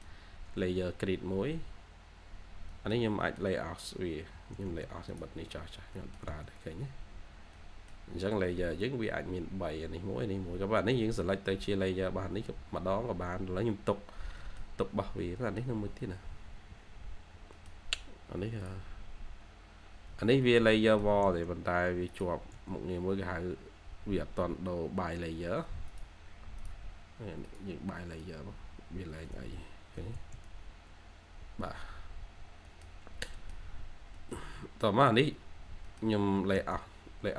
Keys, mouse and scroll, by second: 0.1-0.6 scroll down 1, 0.6-1.4 scroll up 1, 2.6 middle click, 5.5 scroll, 5.6 scroll down 1, 5.8 middle click, 6.2 space, 6.6-7.1 scroll up 1, 7.1-7.4 scroll down 1, 7.4 middle click, 8.2-9.3 scroll up 1, 11.3-12.3 scroll up 1, 14.0 scroll down 1, 14.3 middle click, 15.1 scroll up 1, 15.3 middle click, 15.5 scroll down 1, 16.3-17.3 scroll up 1, 17.5 middle click, 17.8-18.9 scroll up 1, 20.0 Escape, 20.2 Escape, 20.7 middle click, 21.0 scroll down 1, 21.0 1, 22.8-23.2 scroll down 1, 23.2 1, 24.2-25.0 scroll up 2, 24.5 1, 25.0 1, 25.3 scroll down 1, 25.6 1, 29.0 Escape, 29.2 Escape, 29.9 2, 31.2-31.5 scroll up 1, 31.5 2, 32.0-32.6 scroll up 2, 32.3 2, 32.6 middle click, 33.2 scroll up 1, 33.3 middle click, 33.8 scroll down 1, 34.1 middle click, 34.6-35.2 scroll down 1, 35.2-35.8 scroll up 1, 35.8 middle click, 36.1 scroll up 1, 36.3 3, 36.7-37.0 scroll up 1, 37.0 3.